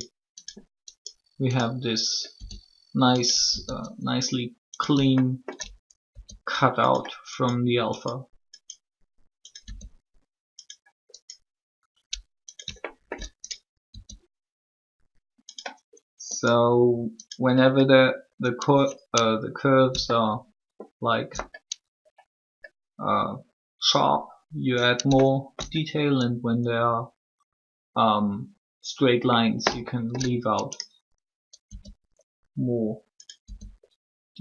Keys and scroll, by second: 2.3 e, 6.1 shift+e, 9.6 e, 13.8 shift+e, 31.6 e, 33.4 e.